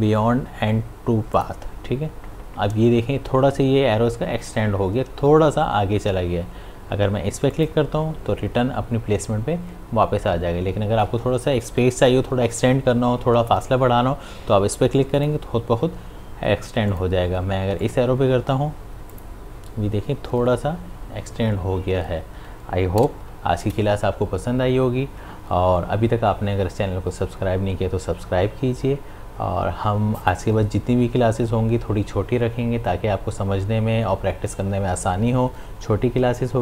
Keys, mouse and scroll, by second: 1.3 click, 7.5 click, 15.1 click.